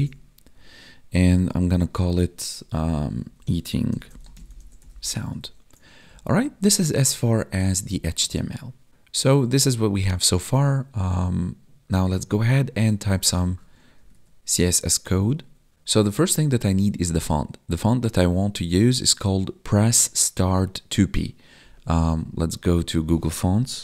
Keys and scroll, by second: 5.1 ctrl+s, 6.0 ctrl+Up, 14.2 Tab.